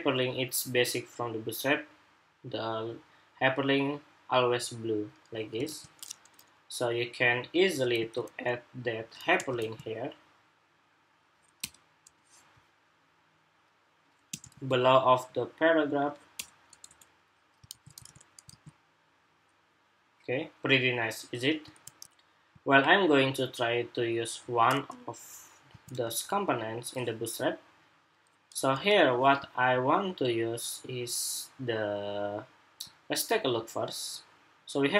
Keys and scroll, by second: 5.4 super+Tab, 7.7 super+c, 9.4 super+v, 14.2 super+v, 17.4 super+s, 17.8 super+Tab, 18.2 super+r.